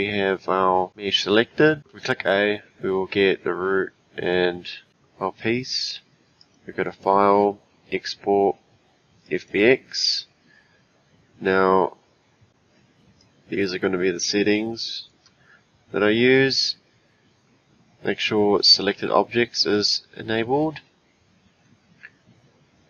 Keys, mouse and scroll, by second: 1.8 click, 1.9 a, 6.4-9.5 drag.